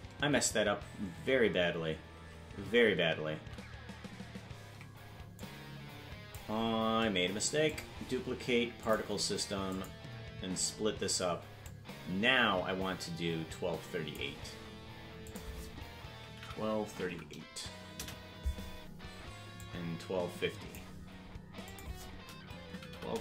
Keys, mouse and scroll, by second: 0.7 ctrl+z, 2.7 ctrl+z, 5.4 click, 7.7-9.0 drag, 9.7 click, 11.7-14.2 drag, 15.2-18.5 drag, 19.7-20.8 drag, 21.6-23.2 drag.